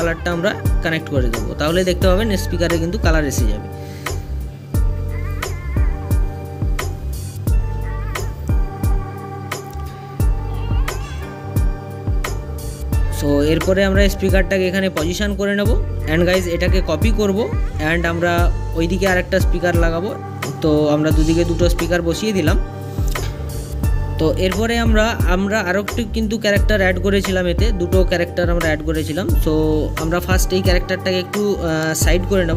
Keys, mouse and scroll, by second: 2.2 click, 4.8-5.4 scroll down 1, 5.4-7.3 middle drag, 7.3 scroll down 1, 7.5-9.5 middle drag, 9.5 click, 10.0 scroll down 1, 10.2-11.0 middle drag, 11.0 click, 11.5-14.3 middle drag, 14.3 click, 14.5-15.8 middle drag, 15.8 click, 16.5-18.3 right drag, 18.3 ctrl+v, 20.2 click, 20.3 scroll down 1, 20.5-21.3 middle drag, 21.3-22.9 scroll up 1, 25.0 click, 25.9 scroll down 1, 26.4-27.7 middle drag, 29.1-30.4 middle drag, 32.3 click.